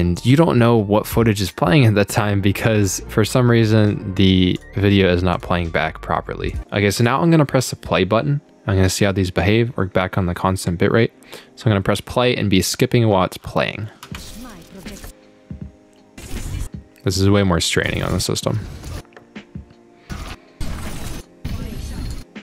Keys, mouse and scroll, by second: 0.2 click, 1.4 click, 3.3 click, 4.6 click, 5.3 click, 6.5 click, 7.0 click, 14.1 space, 15.0 click, 16.5 click, 18.1 click, 18.9 click, 20.2 click, 21.1 click, 22.1 click.